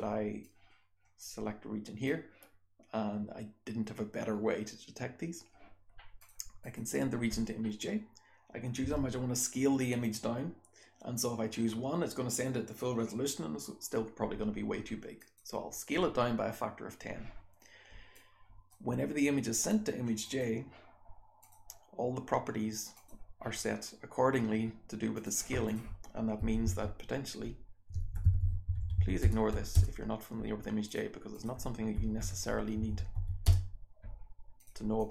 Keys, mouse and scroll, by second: 0.5-2.0 drag, 6.1 click, 6.2 scroll down 1.